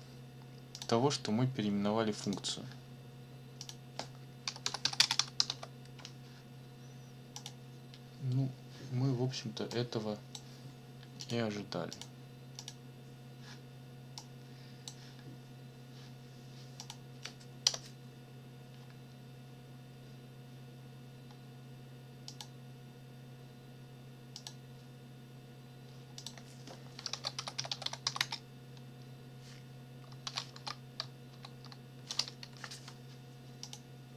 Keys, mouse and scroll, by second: 0.7 click, 2.2 click, 3.6 click, 4.2-6.0 typing, 7.3 click, 9.7 click, 11.2 click, 11.9 click, 12.6 click, 14.2 click, 16.8 click, 17.6 Return, 22.3 click, 24.3 click, 26.2 click, 26.9-28.5 typing, 30.2 shift+', 30.6 ctrl+shift+v, 31.3 shift+', 32.4 ctrl+Left, 33.6 click.